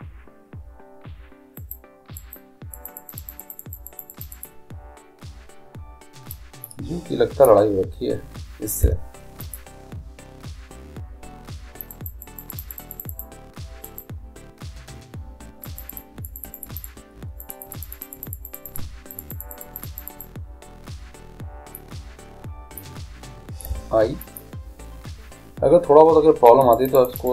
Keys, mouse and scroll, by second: 1.5-8.0 drag, 8.8 i, 11.9-15.5 drag, 15.8-23.5 drag, 24.3 i, 26.4-27.3 drag.